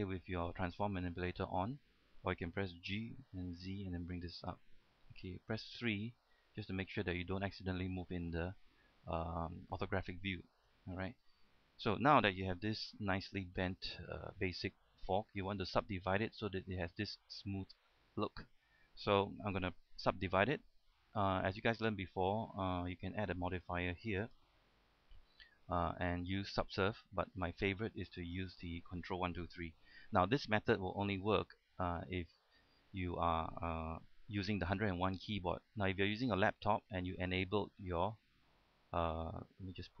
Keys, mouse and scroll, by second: 3.2 g, 3.7 z, 4.7 click, 5.5 KP_3, 7.3-11.0 middle drag, 11.0 KP_3, 11.8 scroll down 1, 12.1 middle click, 12.9 Tab, 13.1 middle click, 14.5-19.2 shift+middle drag, 19.2-19.5 scroll up 1, 19.5 middle click, 24.5 click, 27.9-29.3 middle drag, 37.2-40.0 drag.